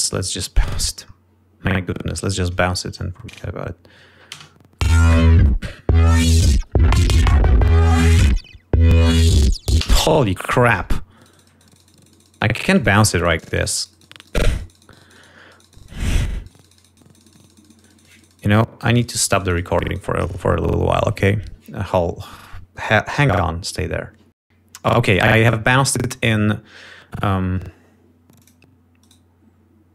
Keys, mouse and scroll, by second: 0.2 click, 1.0 click, 2.0 scroll down 2, 2.7 scroll up 2, 5.1 shift+space, 10.4 space, 11.6-15.6 shift+right drag, 15.7-17.1 shift+right drag, 17.8-20.9 shift+right drag, 26.9 scroll up 2, 29.0 click, 29.5 right click.